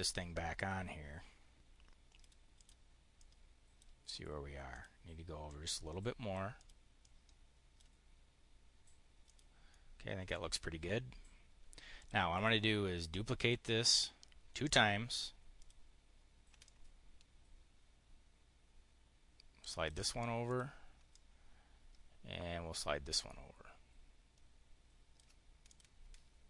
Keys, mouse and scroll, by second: 2.4 click, 2.9 click, 4.6 click, 5.3 click, 6.4 click, 6.9 click, 9.1 click, 9.5 click, 11.8 click, 12.1 click, 13.7 click, 14.5 click, 15.4 click, 16.5-19.8 ctrl+drag, 20.3 click, 21.0-25.1 ctrl+drag, 25.5 click.